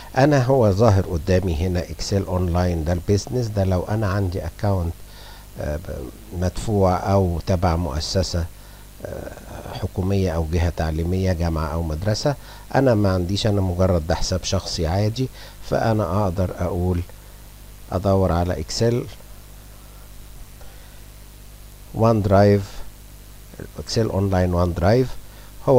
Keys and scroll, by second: 16.9-20.3 typing.